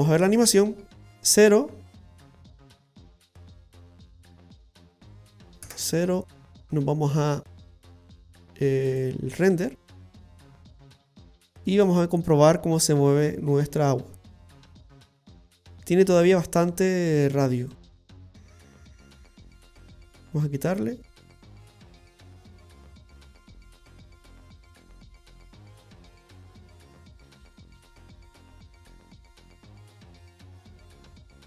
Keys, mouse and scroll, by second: 4.7 space, 5.7 KP_0, 9.1 click, 9.9-11.2 scroll up 7, 11.7 space, 17.8 click, 28.8 click.